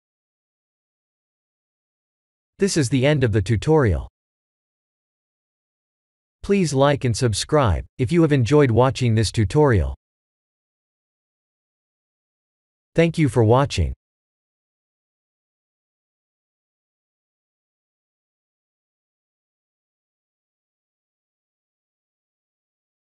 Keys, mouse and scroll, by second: 0.1 ctrl+s.